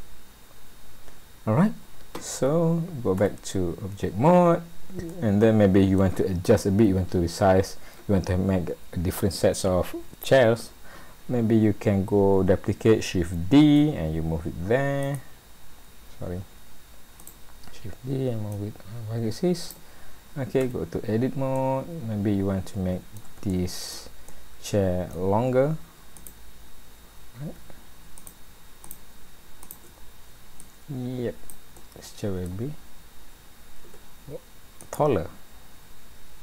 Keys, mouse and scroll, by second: 3.2 Tab, 5.1 middle click, 13.5 shift+d, 17.2 click, 18.5 click, 20.0 scroll up 1, 20.6 Tab, 21.1 scroll up 1, 21.5 middle click, 23.5 shift+middle click, 24.3 middle click, 26.2 click, 28.2 shift+click, 29.1 click, 29.6 shift+click, 30.6 click, 31.8 middle click, 33.9 Tab, 34.8 click.